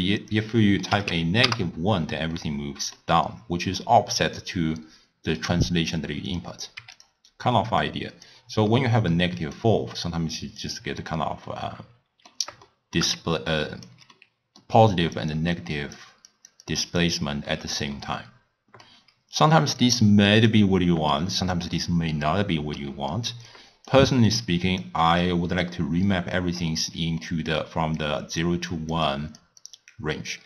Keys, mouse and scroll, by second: 0.2-2.4 drag, 2.4-5.4 middle drag, 6.3-7.1 drag, 7.8 click, 8.7-9.6 middle drag, 9.6 click, 11.5-13.2 middle drag, 13.2-17.6 typing, 13.4 right click, 14.2-14.8 middle drag, 15.0 click, 15.4 click, 15.8 click, 16.4 click, 16.6-17.1 drag, 18.0-19.8 middle drag, 19.8-21.3 drag, 21.3-23.6 middle drag, 23.6 click, 24.3 click, 25.3 click, 27.2 middle click, 27.6-30.4 typing, 28.0-28.5 drag, 28.8 click, 29.1 click, 29.6 click.